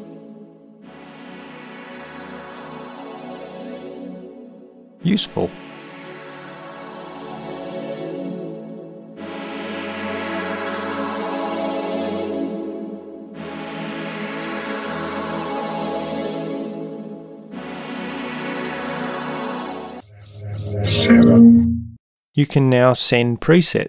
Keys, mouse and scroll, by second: 2.6 right click, 11.8-12.6 right drag.